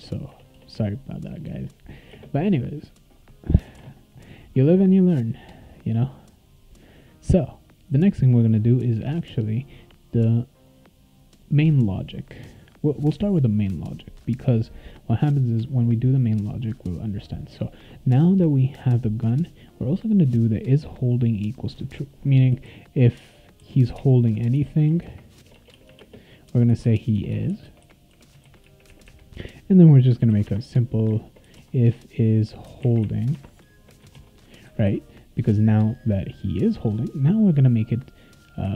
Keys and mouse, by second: 0.0-2.1 typing, 1.2 click, 3.8 ctrl+s, 9.5 click, 10.7 click, 11.3 click, 17.5 click, 22.3-24.0 typing, 24.5 Tab, 25.0-28.6 typing, 30.0-33.5 typing, 34.1 ctrl+s.